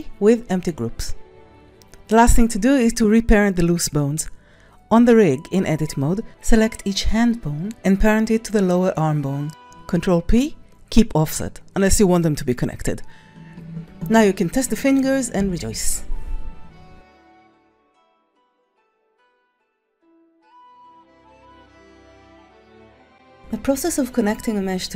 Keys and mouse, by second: 2.3 drag, 2.8-3.3 drag, 4.0 click, 4.2 c, 4.5 ctrl+click, 5.3 ctrl+r, 6.7 Tab, 7.1 click, 7.5 s, 7.6 click, 8.2 c, 10.8 ctrl+click, 11.1 ctrl+s, 11.3 click, 14.3 ctrl+Tab, 14.4 click, 14.5-16.2 typing, 15.2 click, 15.7 click, 15.9 middle click.